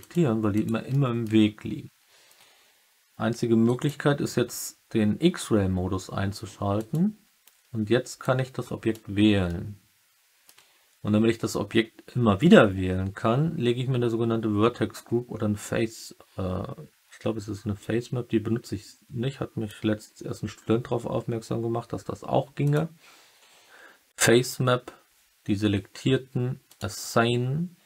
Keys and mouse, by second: 0.5 alt+click, 0.8 alt+middle click, 3.6 click, 8.2 click, 9.4 alt+middle click, 9.8 alt+click, 10.1 alt+middle click, 22.6 click, 26.6 click.